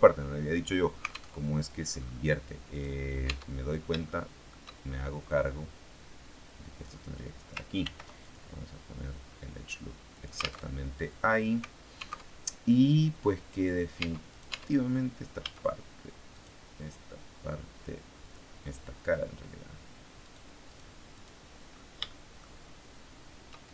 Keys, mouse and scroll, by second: 1.3 alt+Tab, 2.6 right click, 3.2 Tab, 3.9 shift+middle click, 5.1-6.9 drag, 7.7 ctrl+r, 8.2 ctrl+r, 8.2 ctrl+click, 10.0 alt+click, 10.5 alt+Tab, 12.1 alt+Tab, 13.9 Tab, 14.3 click, 15.3 a, 16.2 right click, 18.1 click, 20.1 right click, 20.6 right click, 21.6-22.0 scroll up 1, 22.0 shift+middle click, 23.5 shift+right click.